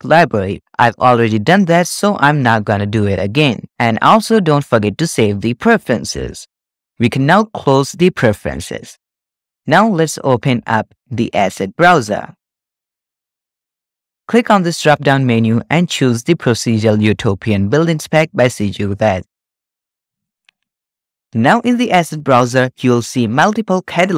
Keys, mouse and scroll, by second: 10.0-11.9 drag, 12.5-14.2 drag, 15.0-19.9 drag, 21.5 click, 22.2 click, 22.8 click.